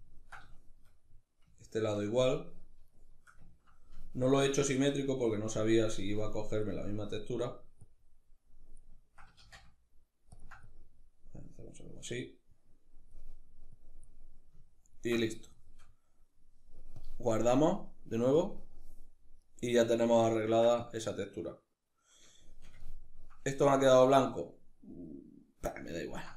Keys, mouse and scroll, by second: 3.6-6.4 ctrl+drag, 6.4-7.2 middle drag, 7.2-13.7 drag, 13.7-26.3 ctrl+middle drag.